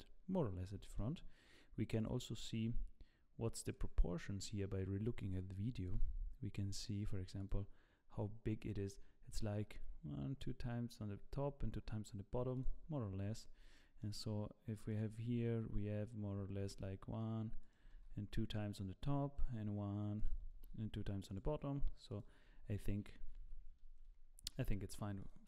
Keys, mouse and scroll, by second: 0.8 g, 13.2-13.7 scroll up 3, 13.7 shift+middle click, 14.9 click, 16.6 shift+d, 17.9 shift+d, 20.7 shift+d, 22.1 shift+click, 23.2 ctrl+z, 23.4 ctrl+z, 24.5 ctrl+z, 25.3 click.